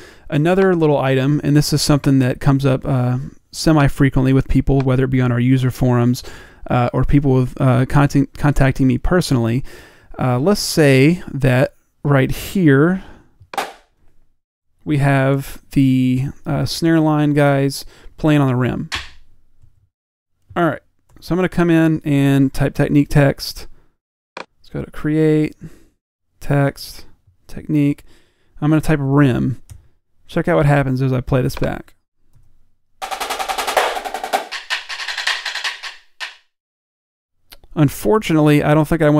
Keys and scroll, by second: 28.6-31.1 typing, 32.4 p.